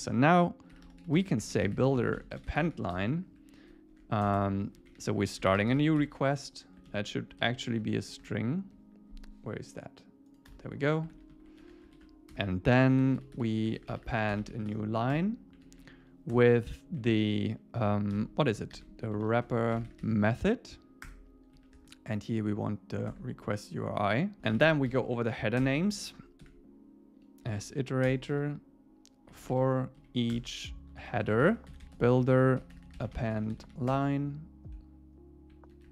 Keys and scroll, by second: 2.9 Return, 4.8 Left, 8.1 super+Right, 11.2 super+Right, 11.4 Left, 11.9 super+space, 12.0 super+Right, 12.4 Return, 15.2 Return, 16.9 Left, 18.7 alt+8, 21.1 Return, 21.6 Right, 23.1 Tab, 24.4 Return, 25.6 Return, 28.1 Return, 30.0 Down, 30.3 Return, 33.9 Return, 34.4 Return.